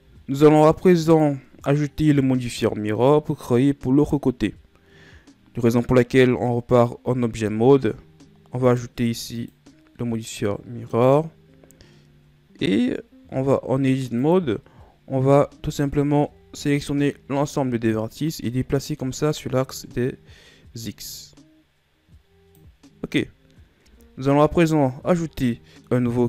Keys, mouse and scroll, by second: 1.1 right click, 2.1 KP_1, 5.8-6.3 scroll up 1, 6.6-8.6 scroll up 1, 8.6-12.4 drag, 12.4 scroll down 2, 14.2-15.2 drag, 15.2 Tab, 15.6 a, 16.7 a, 18.3-21.4 drag, 23.9 Tab, 24.5 a, 25.0-25.5 scroll down 3, 25.5-25.8 middle drag.